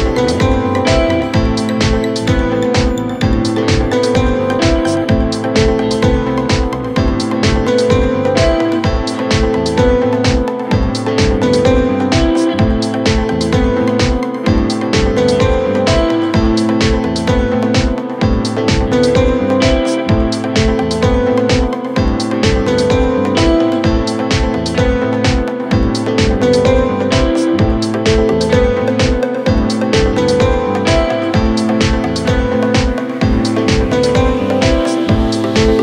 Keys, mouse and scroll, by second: 0.9 Delete, 1.4 click, 1.5 scroll up 6, 1.8-2.6 middle drag, 2.6 scroll down 2, 3.0 scroll up 1, 3.1 scroll down 1, 3.2-5.0 middle drag, 5.0 KP_1, 5.2 KP_3, 5.9 middle click, 6.6-7.1 scroll down 9, 7.1 scroll up 2, 7.3-8.2 middle drag, 8.2 click, 8.5 Tab, 9.1 middle click, 9.4 ctrl+r, 10.3 click, 10.4 scroll up 1, 10.5 middle click, 10.6 scroll down 8, 10.9 middle click, 11.4 ctrl+z, 11.6 ctrl+z, 11.9 ctrl+z, 12.1 click, 12.3 Tab, 13.0 ctrl+r, 14.7 scroll up 8, 14.9 click, 15.0 middle click, 15.6 alt+x, 15.9 click, 16.0 middle click, 16.8 Tab, 17.2 click, 17.3-17.6 middle drag, 17.6 click, 17.7 middle click, 17.9-19.0 scroll up 1, 20.1-20.8 middle drag, 20.8 shift+a, 21.5 middle click, 21.9 KP_1, 22.0 KP_3, 22.6 KP_1, 23.4 r, 24.5 click, 25.4 middle click, 25.7 KP_Enter, 25.9 middle click, 26.1 drag, 26.2 middle click, 26.4 scroll down 1, 26.5 middle click, 26.7 Tab, 27.2-28.4 middle drag, 28.5-29.5 middle drag, 29.8 ctrl+r, 30.8-33.5 drag, 34.0 click, 34.8-35.8 drag.